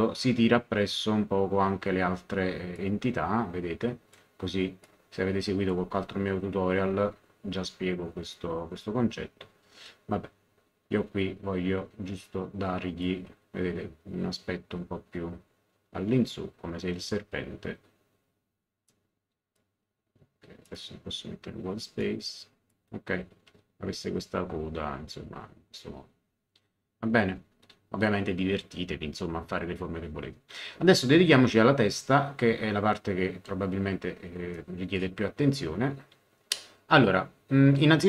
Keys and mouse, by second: 2.7 click, 4.8 click, 12.2 click, 18.9 click, 20.6 click, 22.0 click, 34.5 middle click.